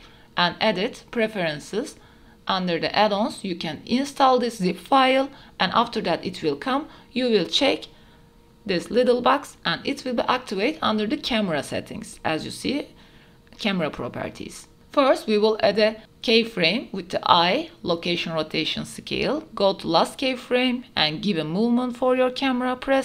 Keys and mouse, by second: 1.1-1.9 drag, 14.5 click, 15.7 i, 18.5 click, 20.4 q, 21.3-22.4 w.